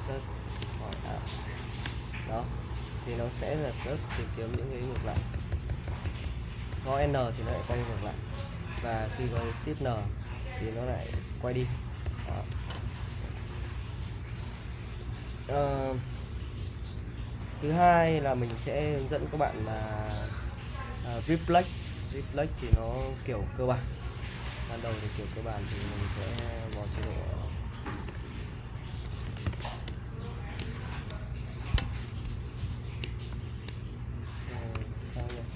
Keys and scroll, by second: 0.3-1.7 typing, 1.9 Return, 4.5-7.7 typing, 9.4 shift+n, 10.6-12.3 typing, 18.3 super+Tab, 22.7 Escape, 24.4 BackSpace, 26.4-30.9 typing, 31.7 Escape, 32.3 Escape, 33.3 :, 34.5-35.5 typing.